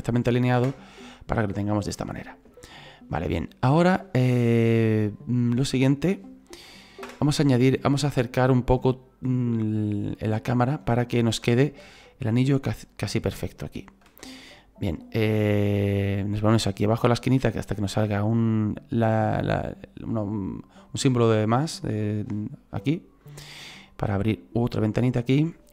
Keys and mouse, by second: 0.6 KP_0, 7.1 KP_0, 11.3 KP_0, 14.1 KP_0, 23.2 click.